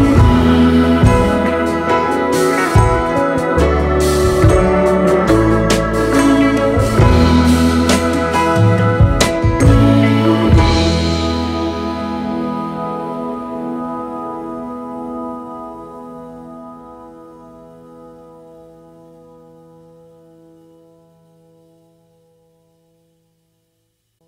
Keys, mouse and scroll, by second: 2.2 BackSpace, 4.0 alt+scroll up 1, 4.9-5.2 alt+scroll up 1, 8.2 alt+scroll up 1.